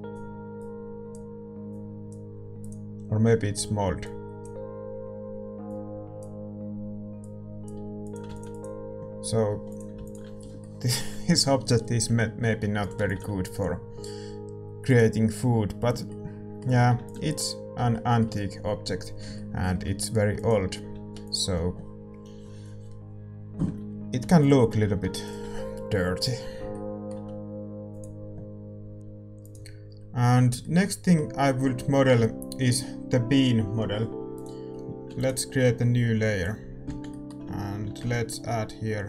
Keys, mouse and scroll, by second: 8.3 ctrl+s, 16.2 ctrl+s, 16.2-24.4 middle drag, 17.0 ctrl+s, 20.9 ctrl+s, 20.9-26.7 drag, 26.7 ctrl+s, 26.7-29.0 middle drag, 29.0 ctrl+s, 29.6-30.7 drag, 34.7-39.0 drag, 34.7-36.3 middle drag, 34.7 shift+z, 36.3 ctrl+s, 36.8 shift+c.